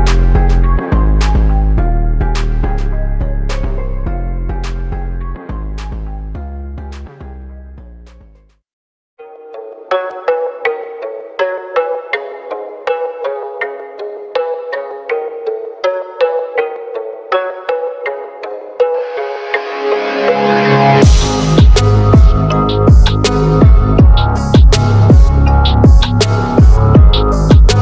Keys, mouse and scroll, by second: 1.3 click, 5.6 click, 6.2 right click, 6.3 click, 9.5 click, 10.0 click, 10.6 typing, 10.8-16.7 drag, 17.5 click, 20.0 ctrl+t, 20.4-23.6 drag, 23.6 ctrl+t, 24.0-25.4 drag, 25.4-26.8 drag, 26.8 right click, 27.4-27.8 drag.